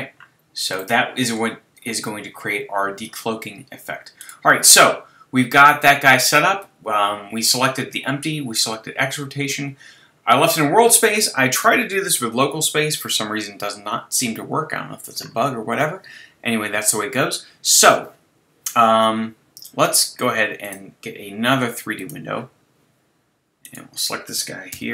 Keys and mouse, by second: 4.2-6.5 drag, 14.4-16.6 middle drag, 20.6-22.4 drag, 24.8-24.9 drag, 24.8 n.